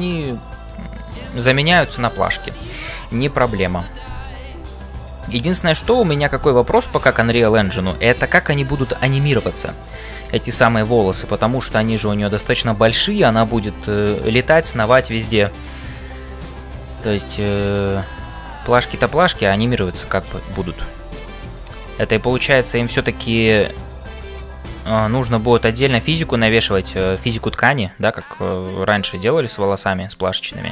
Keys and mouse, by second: 0.0-30.7 typing, 4.6 middle click, 5.4 click, 5.9 middle click, 8.5 middle click, 9.8 middle click, 16.0 shift+middle click, 16.5 middle click, 18.3 middle click, 21.1 click, 22.6 shift+middle click, 28.2 middle click, 29.8 middle click, 30.5 click.